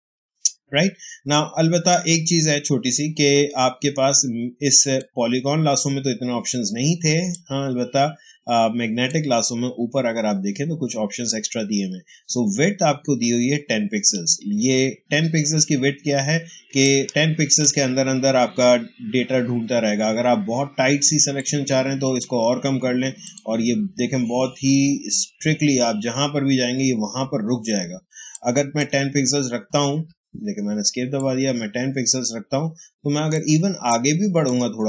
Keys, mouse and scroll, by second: 7.2-11.5 drag, 16.4 click, 16.4 ctrl+space, 16.7 ctrl+click, 16.9 ctrl+space, 21.3-23.1 drag, 27.8 space, 28.2 click, 28.3 space, 29.7 Escape, 31.1-33.5 drag, 33.8 click, 34.0 space.